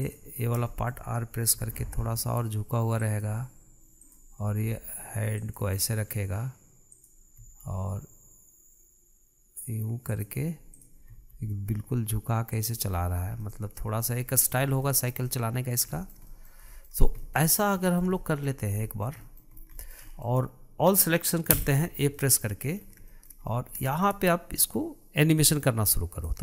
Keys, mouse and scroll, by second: 0.9 drag, 1.3 scroll down 1, 1.5-2.4 shift+middle drag, 2.4 r, 4.9 click, 5.3 r, 7.7 click, 8.2 r, 11.6 click, 12.0 r, 13.7-14.2 scroll down 6, 14.2-15.1 middle drag, 15.1-15.7 scroll up 4, 15.7-17.8 shift+middle drag, 17.8 scroll down 1, 18.0 middle click, 18.4 scroll up 2, 18.7-20.4 shift+middle drag, 20.4 scroll down 1, 20.6-22.3 shift+middle drag, 22.3 a, 23.0-23.6 middle drag, 23.6-23.9 scroll up 2, 23.9-26.1 shift+middle drag, 26.1 click.